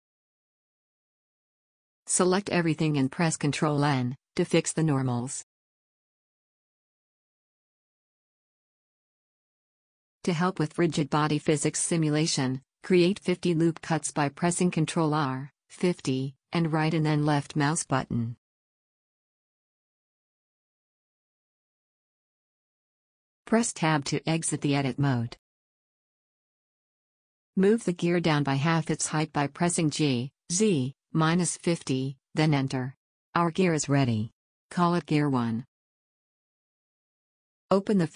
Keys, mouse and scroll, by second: 3.7 a, 3.9 a, 5.5 ctrl+n, 8.1-10.8 middle drag, 10.8 a, 10.8 shift+r, 11.3 ctrl+r, 18.0-19.4 drag, 19.8-21.2 drag, 23.5 Tab, 25.9 middle click, 26.9-29.0 middle drag, 27.8 KP_1, 28.7 g, 32.0-33.8 middle drag, 33.8-35.0 drag, 36.1-38.0 middle drag.